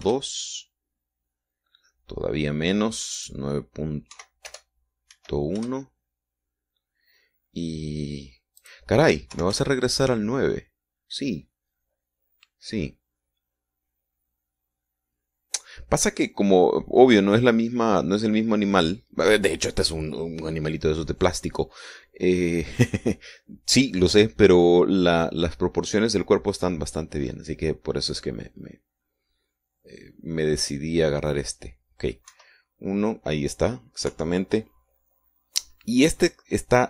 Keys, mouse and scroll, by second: 0.4 Right, 0.7 BackSpace, 1.2 KP_2, 1.4 KP_Enter, 4.6 click, 5.5 Right, 5.8 BackSpace, 6.5 KP_1, 7.0 KP_Enter, 10.0 click, 10.7 KP_9, 10.9 KP_Enter, 31.2 scroll up 1, 31.7 scroll up 1, 33.7 KP_1, 35.5 KP_3.